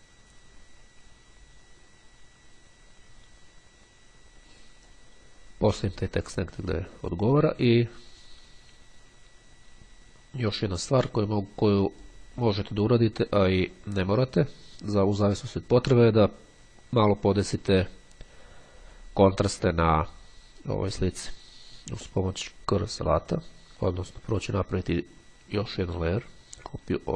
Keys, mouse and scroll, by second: 10.6-12.4 drag, 22.6-23.7 drag, 24.0 click.